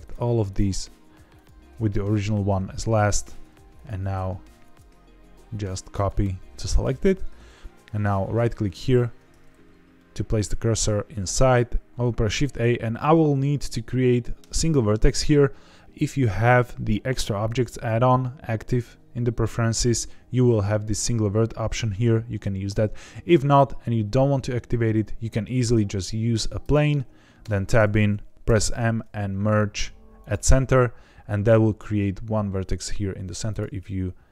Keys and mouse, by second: 0.0 shift+click, 4.6-6.0 drag, 6.6 click, 8.7 shift+right click, 10.0 middle click, 12.0 shift+a, 27.4 Tab, 28.4 m, 33.4 click.